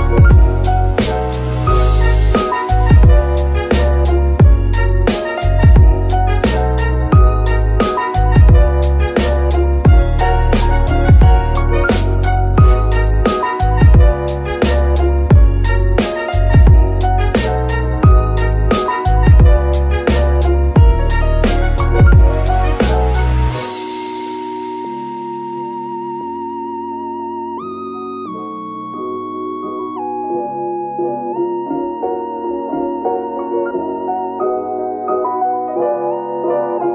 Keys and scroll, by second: 0.4 g, 0.9 Escape, 2.5 g, 4.4 Escape, 5.4 g, 6.1 Escape, 6.9 r, 7.1 x, 8.6 Escape, 9.2 g, 9.6 Escape, 10.9 shift+g, 11.6 Escape, 12.4 r, 12.7 x, 14.3 Escape, 18.1 shift+a, 22.9-24.7 typing, 25.8-27.9 typing, 32.1-34.1 typing.